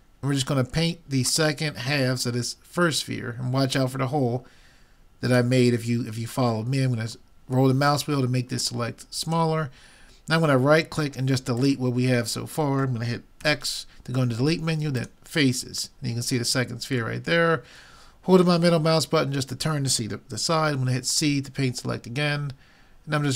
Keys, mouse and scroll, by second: 13.5 x, 17.2-18.9 middle drag, 20.7 c.